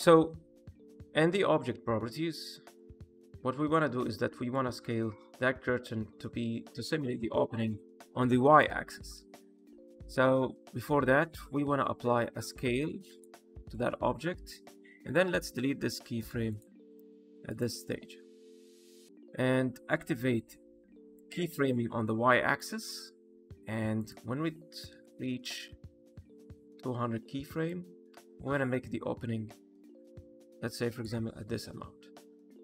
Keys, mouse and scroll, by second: 0.4 middle click, 2.6 click, 4.4 click, 9.1 ctrl+z, 12.3 ctrl+a, 15.0 click, 15.7 x, 17.4 click, 21.1 click, 23.9 click, 25.3 KP_0, 27.6 click.